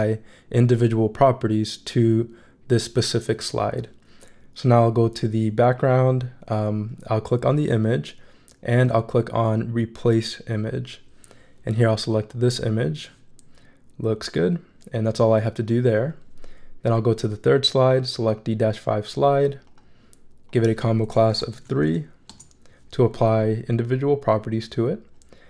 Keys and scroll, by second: 21.1-22.1 typing, 22.3 Return.